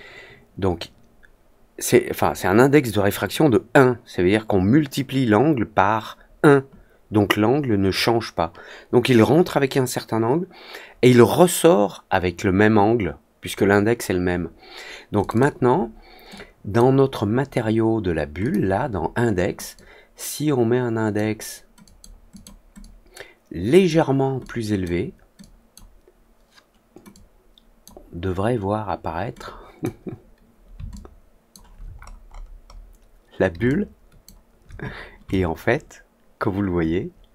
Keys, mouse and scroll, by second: 15.1 click, 15.3 click, 16.3 click, 18.3 click, 19.7-21.1 drag, 21.8 click, 22.3 click, 22.7-23.8 drag, 24.3 click, 25.3 click, 27.0 click, 29.3 click, 30.9-31.4 alt+drag, 31.9-32.3 scroll up 2, 32.6 middle click, 33.0 middle click, 33.6-34.2 alt+drag, 35.2-37.3 alt+drag.